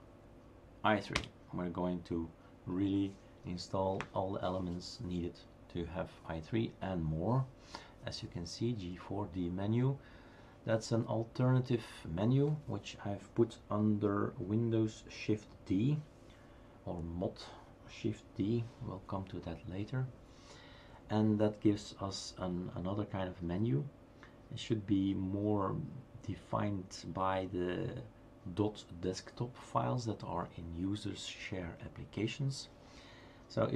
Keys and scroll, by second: 1.2 Return.